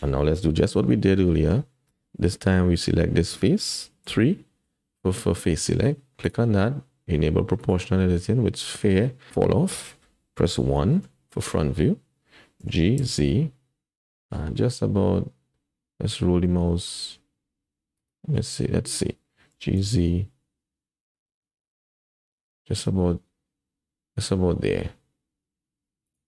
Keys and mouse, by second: 0.8 middle click, 4.0 3, 5.5 middle click, 7.6 click, 10.9 KP_1, 12.6 g, 18.3 middle click, 19.5 g.